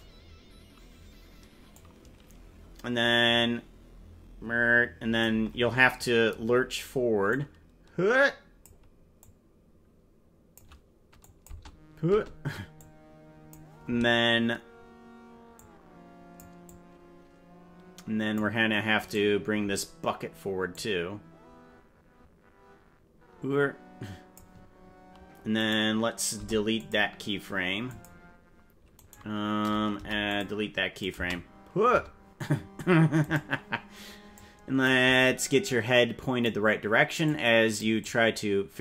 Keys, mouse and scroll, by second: 1.7-5.2 drag, 7.3-8.6 drag, 9.2-10.6 drag, 11.2 click, 11.5 space, 12.1 space, 12.7 click, 15.5 click, 16.6-18.4 drag, 19.1 right click, 20.7-24.3 drag, 25.7 right click, 26.5 Delete, 27.8 click, 29.1 right click, 29.9 Delete, 31.0-32.1 drag, 31.1 space, 31.9 space, 33.3 right click, 34.3 click, 35.6 click, 37.2 click, 38.0-38.8 drag.